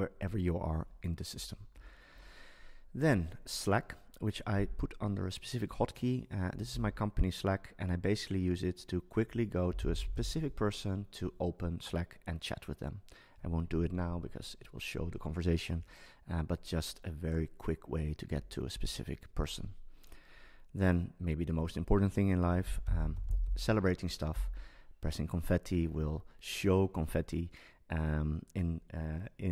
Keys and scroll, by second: 6.7 super+s, 22.6 super+space.